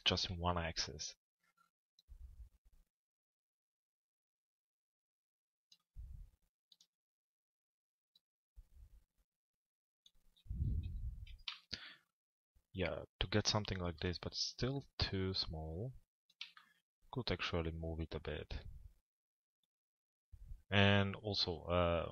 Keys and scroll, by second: 0.3 z, 10.4 p.